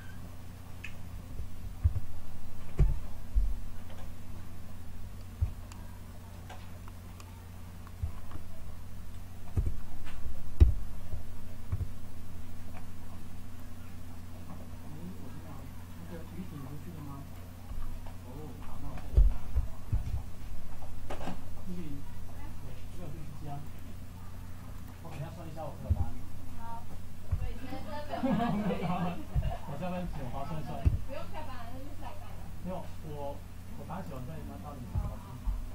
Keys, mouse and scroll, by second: 1.7 z, 2.7 KP_5, 9.5 Tab, 10.5 a, 11.6 b, 15.5-17.2 drag, 19.8 ctrl+r, 25.8 a, 27.2 b, 29.2 KP_7, 30.7 s, 34.8 KP_1.